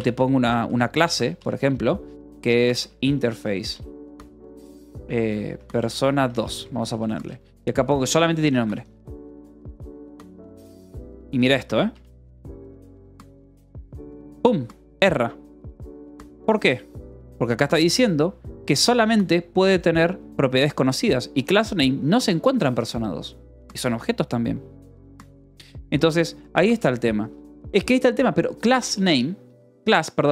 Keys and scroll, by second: 0.0-13.3 typing, 0.2 Escape, 1.4 Return, 7.1 Return, 10.6 Escape, 13.6 Escape, 15.9 space, 16.1 d, 24.1 Escape, 26.2 j, 27.3 j, 29.4-30.3 typing, 29.6 Escape.